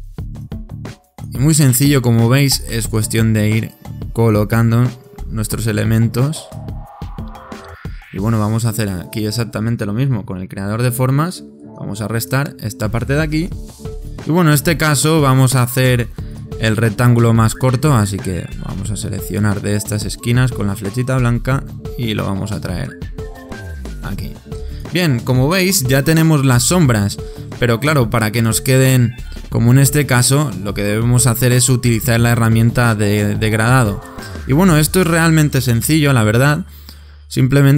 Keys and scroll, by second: 10.0 shift+m, 26.4 super+-, 35.8 super+-.